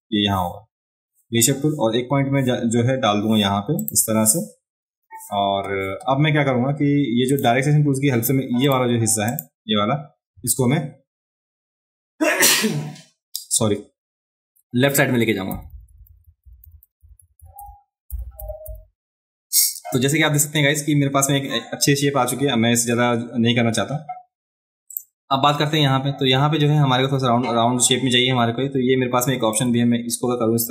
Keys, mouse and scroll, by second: 3.8 click, 7.3 click, 8.6 click, 9.3 click, 24.9 click, 29.5-30.7 drag.